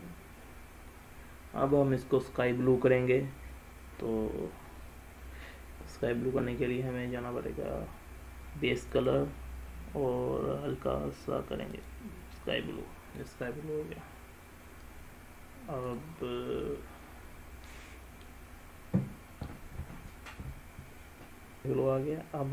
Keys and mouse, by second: 9.1 click.